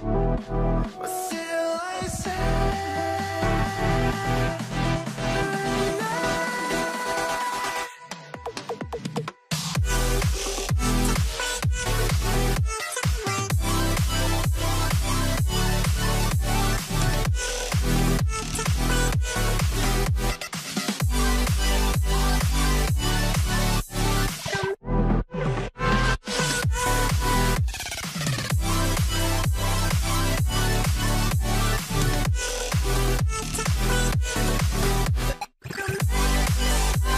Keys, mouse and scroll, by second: 2.5 double click, 4.2 double click, 10.0 space, 10.2 alt+click.